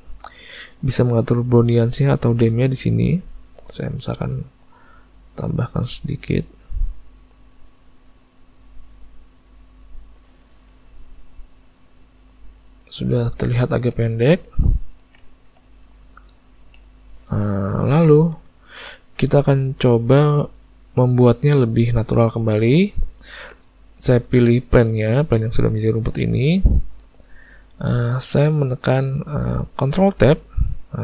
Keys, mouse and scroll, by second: 4.3 click, 6.8 shift+click, 10.9 middle click, 12.5 middle click, 13.4 ctrl+middle click, 13.7 ctrl+middle click, 14.1 shift+middle click, 14.6 ctrl+middle click, 14.9 ctrl+middle click, 15.3 shift+middle click, 16.4 shift+middle click, 30.3 ctrl+Tab.